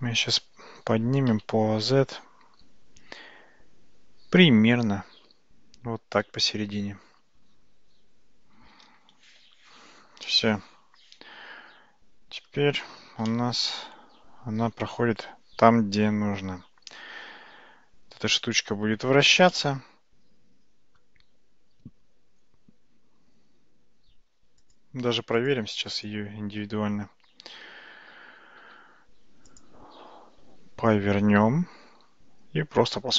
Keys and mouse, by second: 9.5 shift+z, 10.3-12.5 middle drag, 13.0 alt+z, 13.4-18.5 middle drag, 19.6-21.1 middle drag, 31.5 r.